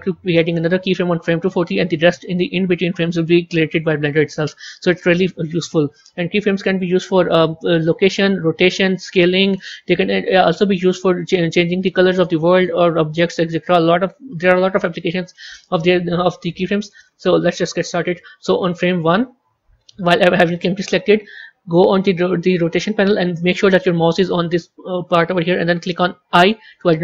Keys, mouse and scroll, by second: 11.5 click, 13.7 click.